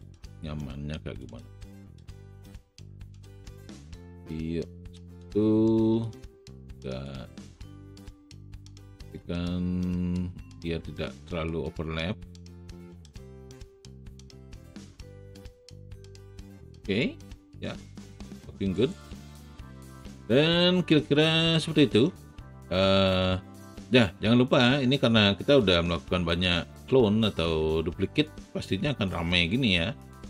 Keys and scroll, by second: 0.0 r, 2.7 w.